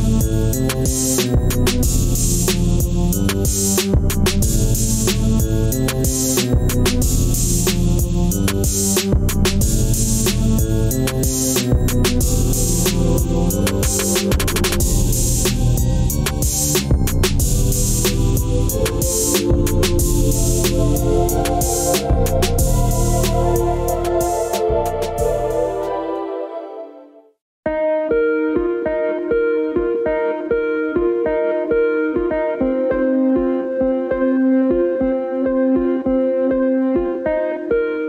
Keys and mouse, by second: 5.1-8.1 middle drag, 8.6 click, 9.4 middle click, 11.9-13.0 middle drag, 13.1 middle click, 14.2 click, 16.1-18.3 drag, 18.3 middle click, 19.6 click, 20.1 click, 21.2-22.8 middle drag, 23.8 click, 24.8 click, 25.5-26.2 middle drag, 26.7 click, 27.1 click, 28.3 click, 29.5 alt+z, 29.9-32.1 drag, 32.1 i, 35.0 middle drag, 35.4-38.0 middle drag.